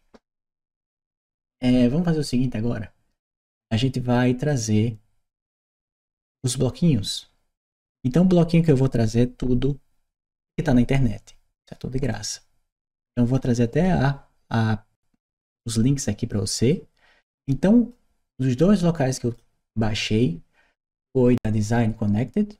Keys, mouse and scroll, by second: 4.2-5.6 drag, 16.5-19.2 drag, 20.8 click.